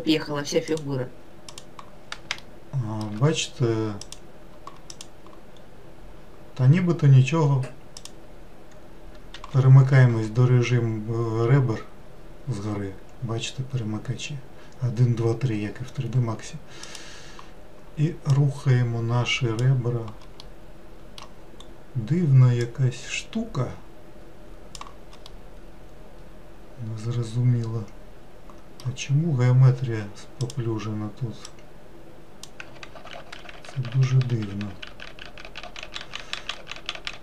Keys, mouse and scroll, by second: 0.7 click, 1.5 click, 2.4-4.0 shift+middle drag, 4.0 click, 4.9 click, 5.5 scroll up 2, 6.2-8.0 scroll down 2, 8.0 click, 9.3 2, 16.8 click, 18.3 click, 20.4-21.5 middle drag, 21.5-22.6 scroll up 1, 22.6 click, 25.3-28.3 middle drag, 30.4 click, 31.4 click, 32.9 ctrl+z, 33.2 ctrl+z, 33.4 ctrl+z, 33.6 ctrl+z, 33.7 ctrl+z, 33.9 ctrl+z, 34.1-35.4 ctrl+z, 35.8 ctrl+z, 36.0 ctrl+z, 36.2 ctrl+z, 36.4 ctrl+z, 36.6 ctrl+z, 36.8 ctrl+z, 36.9 ctrl+z.